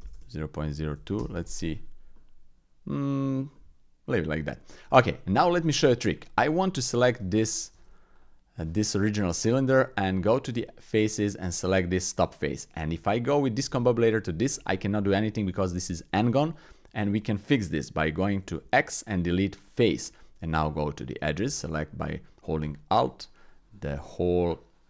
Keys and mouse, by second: 0.1 BackSpace, 2.1 middle click, 3.5 middle click, 4.5 middle click, 5.3 Tab, 6.1 click, 6.7 click, 7.1 Tab, 7.5 click, 7.7 Tab, 8.1 click, 9.9 Tab, 11.1 click, 12.2 click, 12.9 Tab, 13.6 Tab, 14.1 click, 18.5 x, 20.4 Tab, 22.6 alt+click.